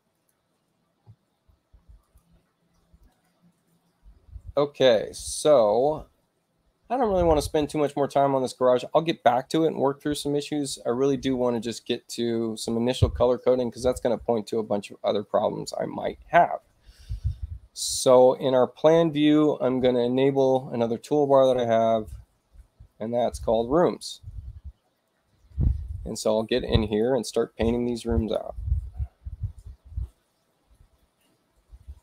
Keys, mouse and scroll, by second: 0.0 click, 1.9 click, 4.1 space, 4.7 click, 11.3 click, 17.7 click, 20.1 right click, 23.0 click, 26.7 click, 28.0 click, 31.9 click.